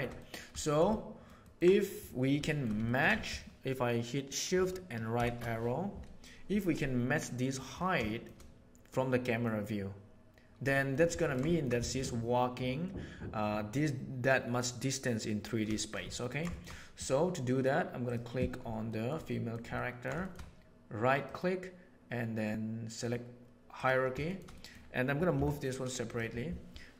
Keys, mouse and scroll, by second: 0.1 middle click, 0.4 shift+middle click, 0.8-1.2 ctrl+middle drag, 1.3 ctrl+middle click, 2.4 shift+middle drag, 2.8 ctrl+middle click, 5.1 shift+Right, 8.0 shift+middle click, 8.9-9.3 middle drag, 10.7 shift+middle click, 11.1 ctrl+middle click, 11.5 shift+middle click, 14.3 middle drag, 15.6 shift+middle click, 16.0 ctrl+middle click, 18.8 shift+middle drag, 19.2 middle click, 19.7 ctrl+middle click, 20.1 shift+middle click, 21.1-23.9 drag, 24.5 middle click, 24.6 click, 25.4 m.